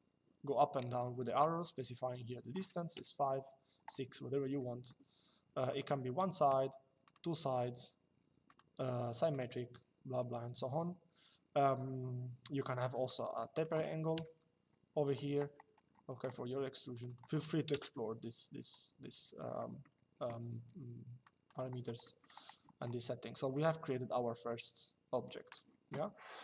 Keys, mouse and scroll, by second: 2.7 KP_5, 5.4 click, 6.8 click, 8.2 click, 12.8 click, 13.9 KP_5, 16.6 click, 17.5 KP_0, 19.2 middle click, 21.0 click, 21.7 middle click, 23.2 shift+middle click, 26.1 click.